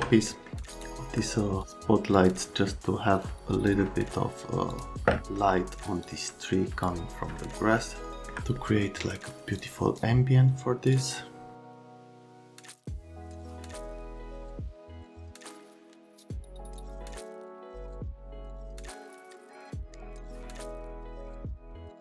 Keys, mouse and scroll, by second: 0.7 click, 2.1 click, 3.2 click, 4.7 click, 5.2 alt+middle click, 6.0 middle click, 7.3 alt+right click, 8.6 right click, 9.6 click, 10.9 click, 14.0 click, 14.7 click.